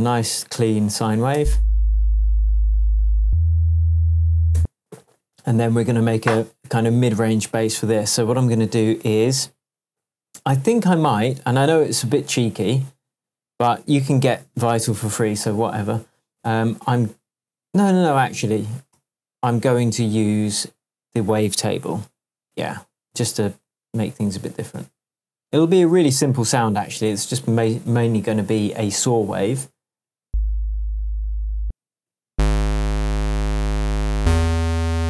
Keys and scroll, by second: 1.3 space, 4.5 space, 18.9 super+z, 30.2 space, 31.6 space.